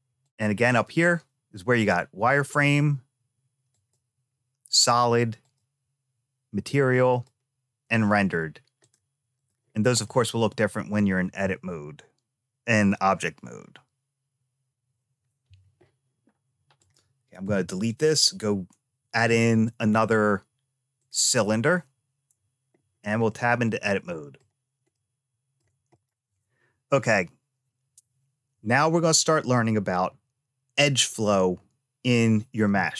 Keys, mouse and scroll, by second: 0.1 click, 3.6 click, 5.3 click, 7.0 click, 8.7 click, 9.9-10.9 middle drag, 16.7 click, 17.3 x, 19.0 shift+a, 22.4 Tab, 23.1-24.3 middle drag, 24.8 shift+middle click, 25.8 click.